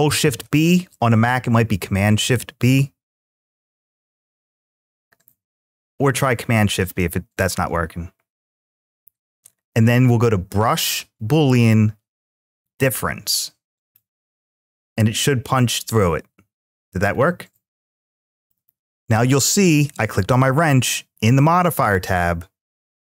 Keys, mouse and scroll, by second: 14.1-21.0 middle drag, 14.1 click.